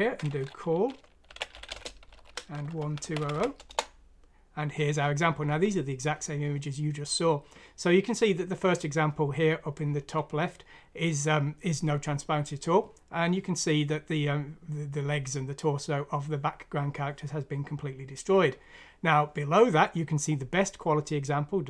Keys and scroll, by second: 1.3-4.1 typing, 3.7 Return.